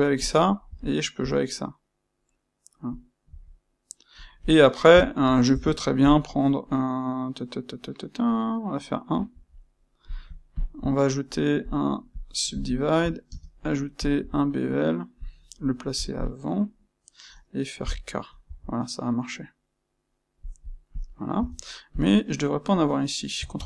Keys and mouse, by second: 6.0 click, 10.5 shift+click, 11.1-12.6 right drag, 12.6 shift+click, 20.9 click, 21.3 Tab, 21.9 click, 23.5 ctrl+x.